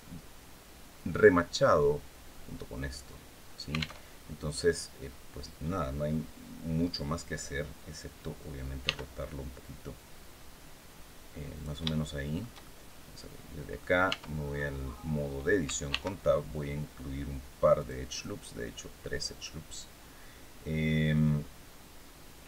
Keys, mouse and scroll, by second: 3.7 alt+Tab, 8.5 r, 11.2 click, 11.6 shift+right click, 12.3-13.6 shift+right drag, 13.8 Tab, 14.2 scroll up 2, 14.6 scroll down 2, 15.6 ctrl+r, 16.6-16.9 scroll up 2, 17.4 click, 18.4-22.4 middle drag.